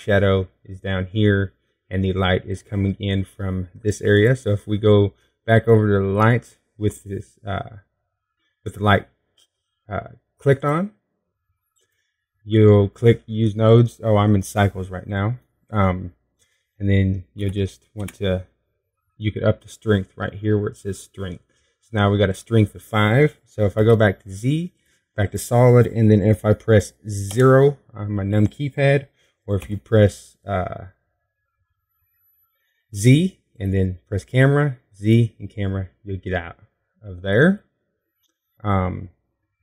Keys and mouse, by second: 5.9-7.9 drag, 12.4-15.5 drag, 25.6 z, 29.1 KP_0, 31.4 q, 36.1 q.